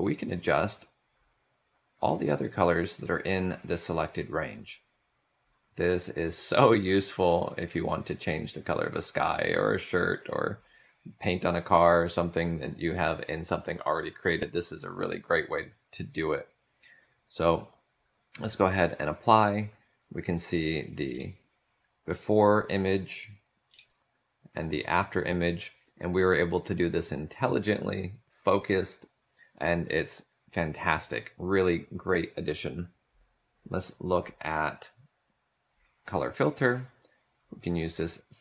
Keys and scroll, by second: 21.3 ctrl+z, 24.8 ctrl+shift+z.